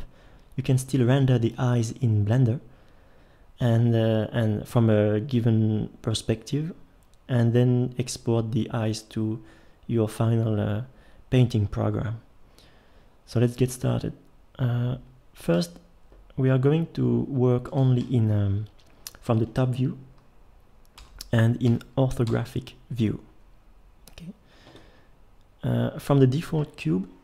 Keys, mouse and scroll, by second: 19.3-21.0 middle drag, 21.0 KP_7, 21.7 KP_5.